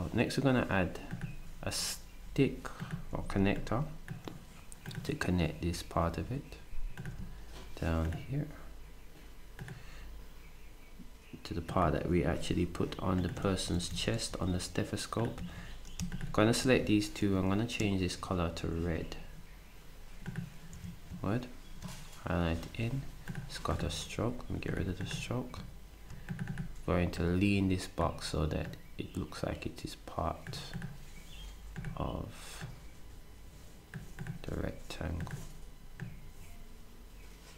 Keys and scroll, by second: 3.1 s, 13.4-15.4 typing, 17.2 d, 20.7 s.